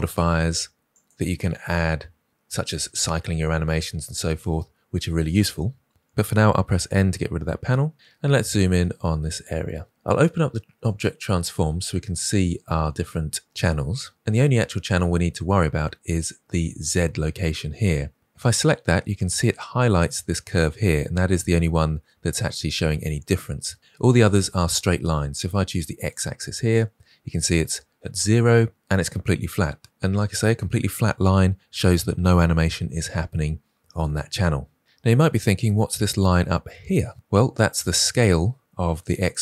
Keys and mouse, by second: 1.0-5.9 drag, 5.9 ctrl+z, 6.6 n, 8.1 middle click, 10.8 click, 25.9 click, 37.9 click, 39.1 click.